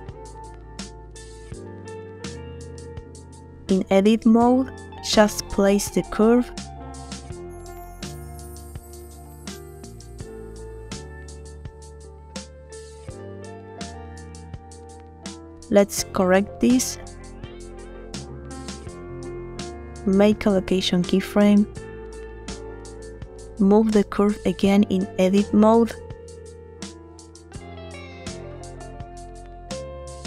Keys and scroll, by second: 3.5 Tab, 14.2 Tab, 20.5 i, 23.7 Tab, 24.9 a, 29.2 Tab.